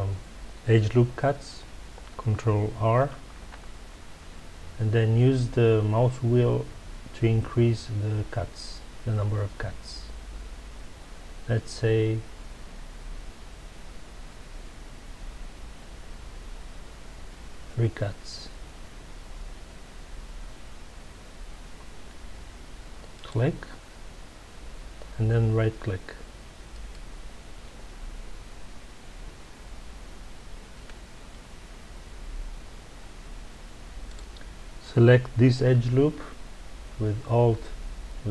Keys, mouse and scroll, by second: 3.2 ctrl+r, 26.9 right click, 34.0 click.